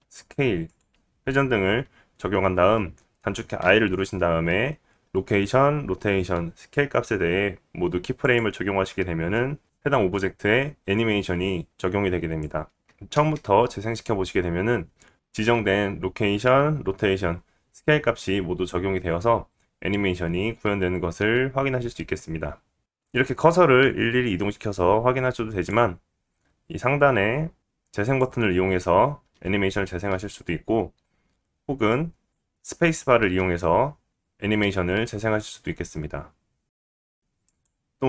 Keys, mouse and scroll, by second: 0.8 r, 3.0-12.8 drag, 3.5 i, 13.1 space, 22.8 click, 22.8 space, 28.0 click, 30.1 click, 31.8 click, 33.3 space, 37.4 click.